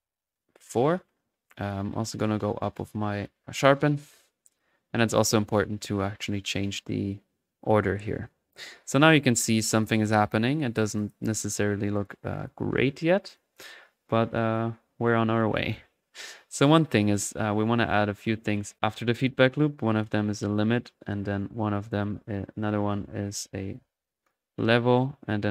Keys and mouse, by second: 1.4-3.4 drag, 3.5-5.7 drag, 7.8 click, 8.7 middle click, 9.0-11.3 drag, 11.7 1, 12.0 click, 13.3-14.8 drag, 14.8 middle click, 15.6 click, 16.0-17.1 middle drag, 17.2 typing, 17.5-17.9 right drag, 18.5-19.3 typing, 19.2 click, 19.9 click, 20.2 click, 21.0 click, 21.3 right click, 21.9 click, 23.7-25.5 typing, 24.2 click, 24.5-25.1 drag.